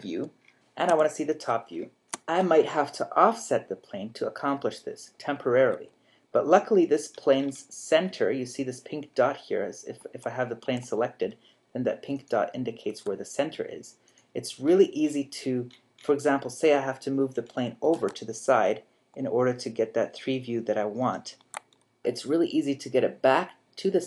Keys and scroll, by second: 10.0 z, 10.6 z, 12.9 a, 17.9 g.